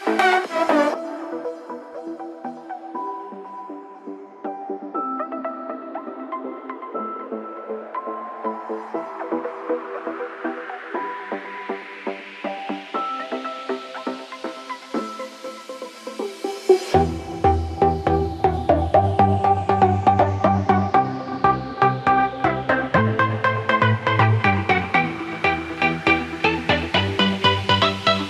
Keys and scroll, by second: 11.3 ctrl+-, 12.1 ctrl+0.